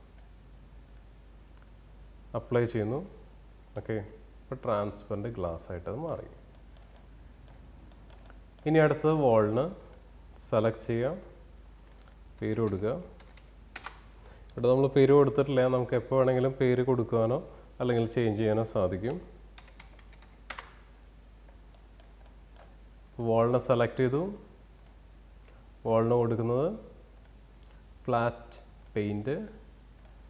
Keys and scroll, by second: 11.1-12.1 typing, 12.6 Return, 17.7-19.1 typing, 19.3 Return.